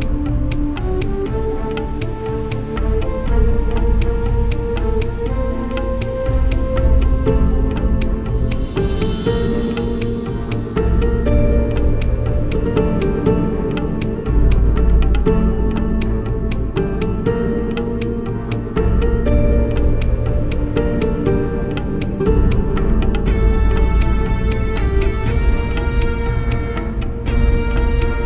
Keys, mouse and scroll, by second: 0.4 Tab, 4.4 Tab, 4.6-6.4 middle drag, 7.0-8.8 right drag, 8.3 i, 10.3 Return, 12.0 Tab, 12.5-13.2 middle drag, 16.2 Tab, 18.9 click, 19.5 right click, 19.9 middle click, 20.0 middle click, 20.8 click, 20.8 middle click, 20.8 right click, 21.0 middle click, 21.0 right click, 21.5 middle click, 21.5-23.5 right drag, 26.5 shift+e.